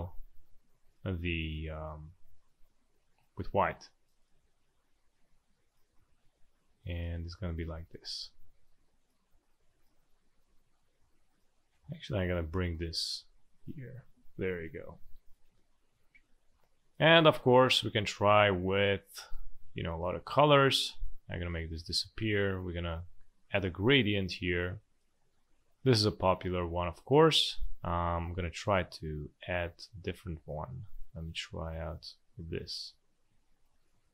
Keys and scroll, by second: 3.7 space, 7.5 v, 8.7 space, 12.7 ctrl+shift+], 14.4 space, 16.1 space, 19.6 space, 26.8 space.